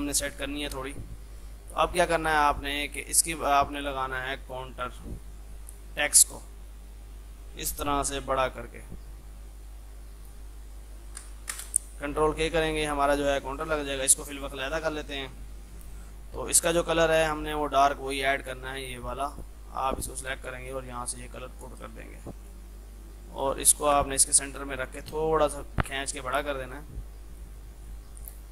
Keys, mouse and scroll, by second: 1.0 F2, 1.5-9.7 drag, 9.7-11.6 drag, 11.6 space, 12.4 ctrl+k, 12.7 click, 17.1 F3, 17.8 F2, 17.8-19.3 drag, 21.1 F2, 21.3 click, 22.1 space, 22.5 click, 23.8-24.7 typing, 25.2-27.9 shift+drag, 28.4-28.5 typing.